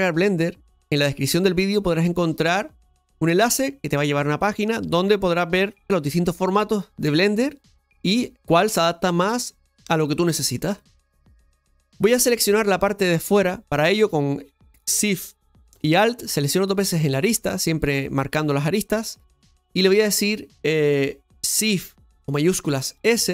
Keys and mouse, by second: 12.3 right click, 16.3 alt+shift+right click, 16.6 alt+shift+right click.